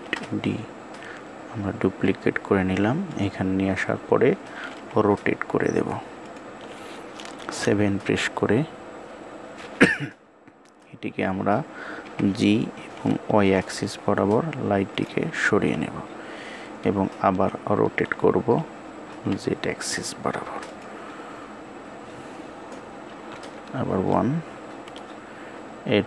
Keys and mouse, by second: 0.7 shift+d, 4.6 r.